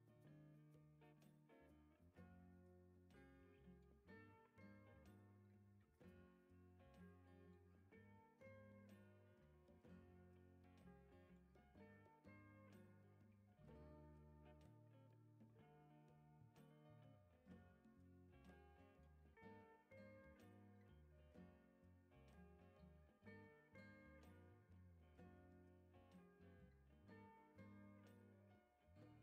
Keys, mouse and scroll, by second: 0.8 click, 3.3 click, 4.6 7, 4.9 5, 5.4 Return, 6.8 click, 7.7 scroll down 1, 8.0 right click, 8.7-9.2 drag, 9.4 right click, 9.9-10.5 drag, 14.1 click, 17.6 click, 20.3 click, 23.9 click, 26.2-27.9 typing.